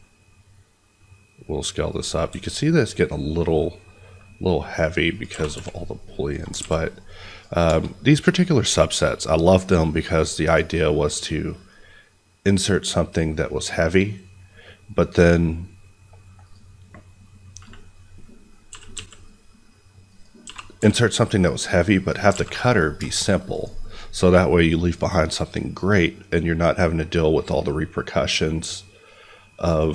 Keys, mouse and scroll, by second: 0.7 scroll down 1, 1.8 click, 2.2 s, 5.1 click, 5.2 g, 5.5 y, 6.2 click, 6.5 a, 6.7 middle click, 7.3 click, 7.6 shift+click, 11.7 scroll down 1, 13.0 scroll up 1, 15.0 click, 17.6-18.0 scroll up 1, 18.1 middle click, 18.6 g, 18.9 x, 20.0 click, 20.4 g, 20.7 y, 22.0 click, 22.3 alt+a, 22.6 middle click, 23.5 click.